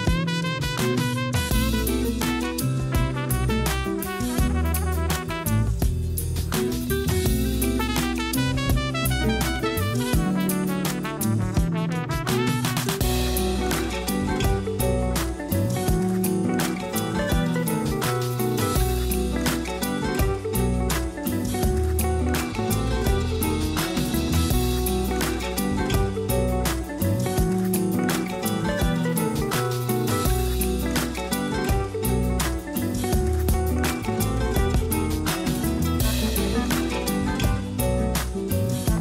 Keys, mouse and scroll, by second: 1.3 ctrl+j, 3.3 Tab, 4.0 a, 4.2 a, 5.3 Tab, 7.1-10.1 drag, 10.8-11.7 scroll down 3, 11.8 scroll up 2, 17.5 click, 30.4-33.4 drag, 33.5-35.3 drag, 35.3 Tab, 36.0 3, 36.3 click, 36.5 click, 37.5 shift+click, 37.6 shift+click, 38.4 shift+click, 38.6 shift+click.